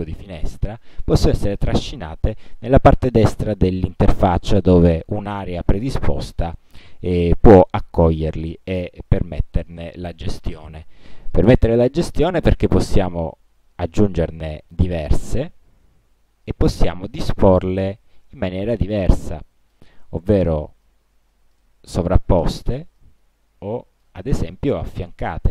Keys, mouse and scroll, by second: 0.6-2.9 drag, 11.4 click, 12.6 click, 14.8-15.7 drag, 16.6-17.3 drag, 17.8-20.1 drag, 21.0-21.9 drag, 23.1-24.4 drag.